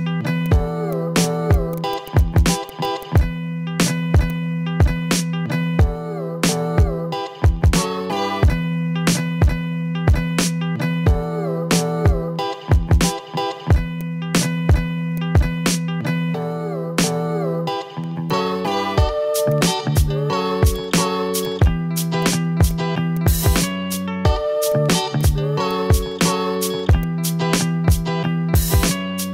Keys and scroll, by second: 0.2 v, 4.2 v, 19.2 ctrl+z, 19.4 v, 22.3 ctrl+z, 23.8 v, 26.9 v.